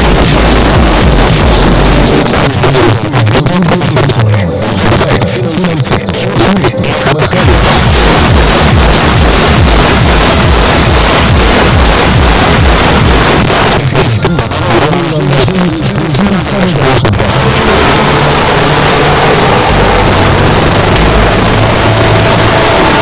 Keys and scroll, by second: 2.2 Page_Down, 13.4 Page_Down.